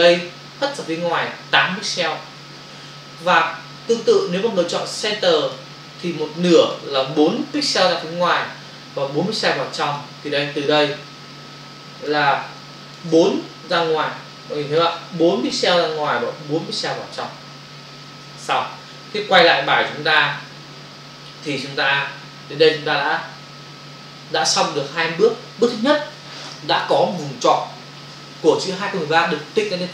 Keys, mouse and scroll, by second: 2.8 ctrl+alt+z, 4.2 click, 5.4 click, 9.9 click, 10.7 ctrl+click, 12.4 space, 12.7 ctrl+click, 13.8 ctrl+click, 18.3 ctrl+o, 20.0 n.